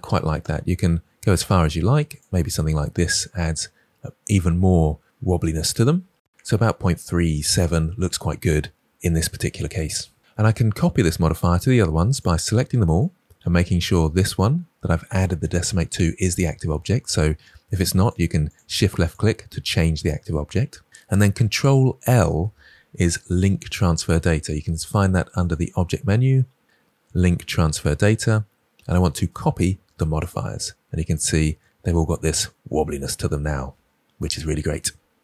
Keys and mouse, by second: 0.3-2.1 drag, 18.4 shift+drag, 18.9 shift+click, 21.9 ctrl+l, 25.5-30.2 drag.